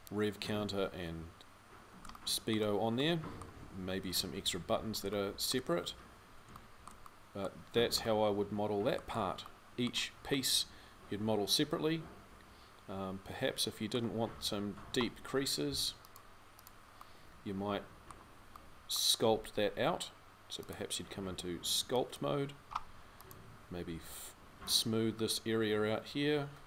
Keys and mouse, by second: 5.3 click, 6.4 middle click, 6.9 middle click, 10.8-12.0 middle drag, 16.4-20.2 drag.